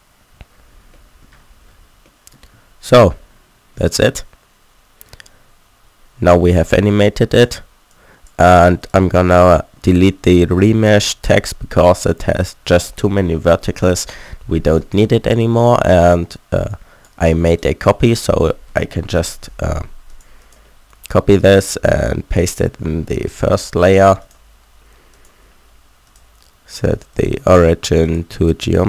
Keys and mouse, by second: 2.6 alt+a, 7.0-8.8 drag, 8.8 middle click, 9.7 click, 10.3 Tab, 10.7 a, 11.1 a, 11.3 Tab, 13.8 Delete, 16.7-18.7 drag, 17.5 right click, 18.2 shift+d, 19.2 m.